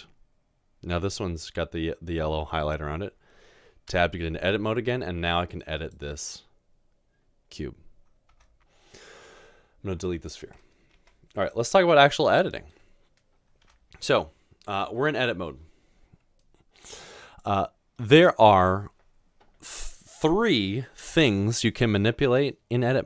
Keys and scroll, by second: 4.0 Tab, 8.4 Tab, 10.9 Delete, 13.7 Delete, 14.6 Tab.